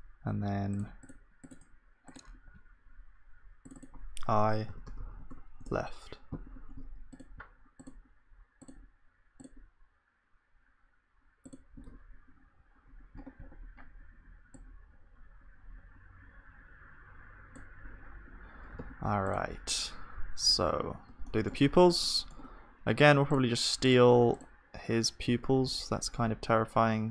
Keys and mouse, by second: 2.7-13.4 drag, 18.0-19.5 middle drag, 18.8 ctrl+s, 19.5-21.3 drag, 20.4 z, 21.3 middle click, 22.3-24.0 middle drag, 23.4-27.1 drag, 25.3 shift+d.